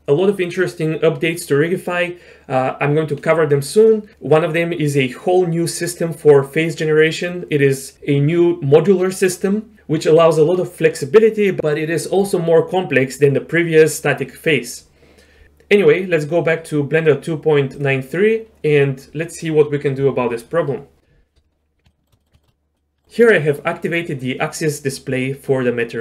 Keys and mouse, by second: 21.9 shift+middle click, 22.2 middle drag, 22.4 shift+middle click, 22.8 middle click.